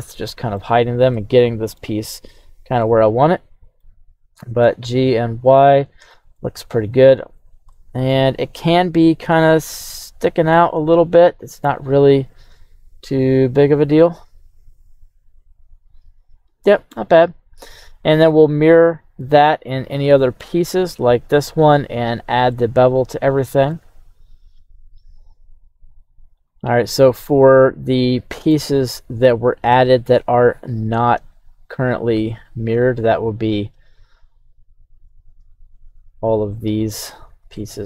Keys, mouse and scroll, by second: 0.2-0.6 middle drag, 0.8 scroll up 1, 1.1-1.8 middle drag, 2.4 right drag, 2.8-4.1 middle drag, 4.4 g, 4.6 y, 6.0 click, 6.3-7.2 middle drag, 7.4 scroll up 1, 7.7-8.2 middle drag, 8.3 right click, 9.3-16.9 middle drag, 17.2 right click, 17.6-18.4 scroll down 3, 18.1 middle click, 19.2-20.5 middle drag, 22.1 right click, 22.1 scroll up 1, 22.5-23.7 middle drag, 24.5 scroll down 2, 25.9-26.7 right drag, 26.7-27.1 scroll up 1, 27.1-28.5 middle drag, 28.8-29.8 scroll down 2, 31.5-32.4 shift+drag, 33.3 right click, 34.2-34.7 shift+drag, 35.1 right click, 35.5 shift+right click, 36.6 shift+drag, 37.1 shift+drag, 37.6-37.8 middle drag, 37.6-37.8 scroll down 1.